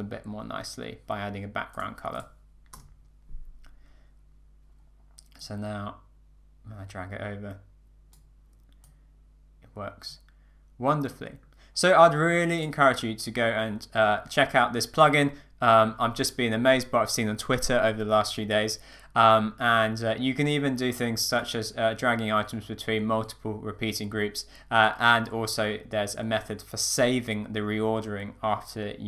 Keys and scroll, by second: 2.7 Return.